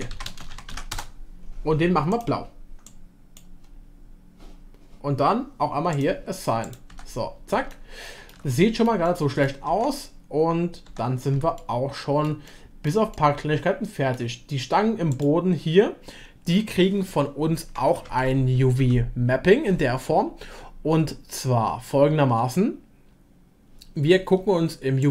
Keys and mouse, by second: 6.0 click, 6.9 Tab, 7.7-8.3 shift+middle drag, 8.5-8.8 middle drag, 9.0 shift+middle click, 9.7 Tab, 11.4 shift+Tab, 11.6 shift+middle click, 12.2 shift+click, 12.5 click, 12.6 middle click, 13.1-14.2 shift+middle drag, 15.1-18.1 drag, 18.1 Tab, 18.8 a.